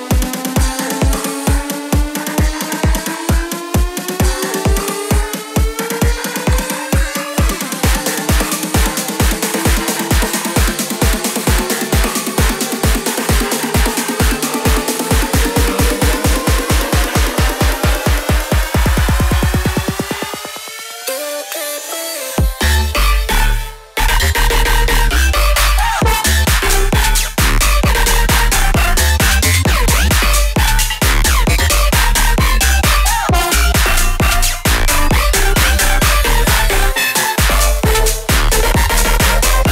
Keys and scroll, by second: 12.5-15.3 typing.